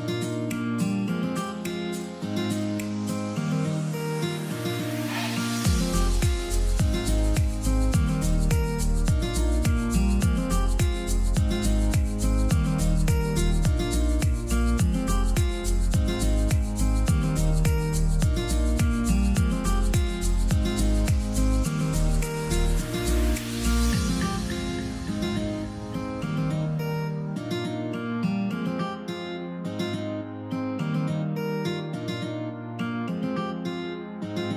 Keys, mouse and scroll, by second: 4.9 click, 7.9 click, 13.7 click, 20.8 click, 21.8 click, 21.8-22.2 scroll up 1, 24.2-24.5 scroll down 1, 26.4 click, 29.0 click.